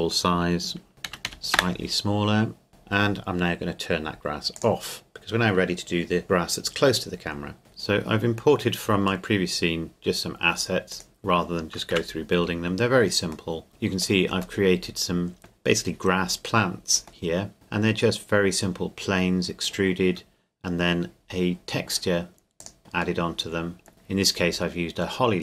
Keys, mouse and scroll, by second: 0.9 KP_0, 1.1 KP_2, 1.2 KP_5, 1.5 KP_Enter, 2.7 click, 4.5 click, 7.6 click, 7.9-9.3 scroll down 1, 9.3 middle click, 10.9 right click, 11.9 KP_Decimal, 12.7-13.5 scroll up 1, 13.5 middle click, 17.5 Tab, 20.0 Tab, 23.2 middle click.